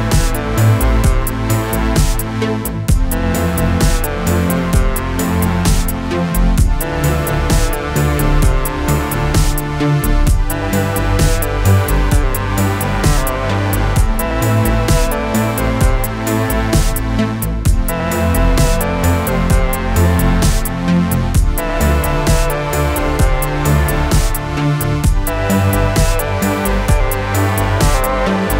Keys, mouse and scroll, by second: 0.8 click, 3.7 click, 5.5 shift+click, 6.7 ctrl+d, 7.6-9.3 drag.